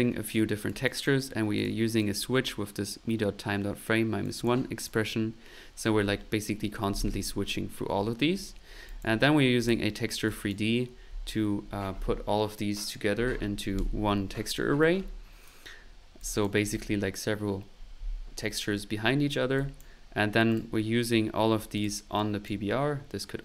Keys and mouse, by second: 0.6 click, 1.6 click, 2.0 click, 4.2 click, 8.9 click, 9.6 click, 10.3 click, 15.8 middle click, 16.2 click, 19.3 middle click, 19.5 click, 20.5 click, 21.7 click, 22.2 click.